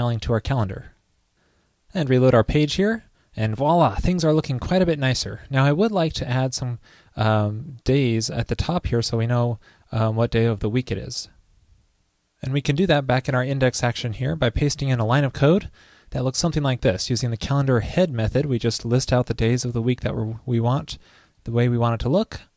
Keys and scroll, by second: 2.4 super+r, 15.5 super+v.